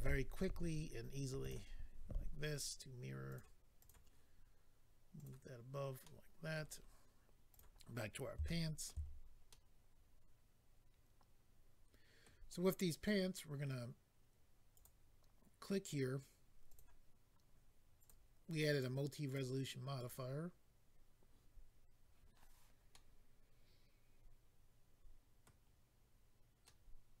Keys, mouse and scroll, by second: 1.4 click, 1.5 click, 3.3 click, 3.3 click, 3.8 click, 3.9 click, 5.1 click, 5.2 click, 6.0 middle click, 6.7-7.5 scroll down 2, 7.5 click, 7.5 scroll down 1, 8.4 shift+middle click, 9.0-9.5 scroll down 3, 9.5 middle click, 14.7 click, 14.8 click, 16.7 click, 16.8 click, 18.0 click, 18.0 click, 18.7 click, 18.8 click, 19.2 click, 20.1 click, 22.9 middle click, 26.6 middle click.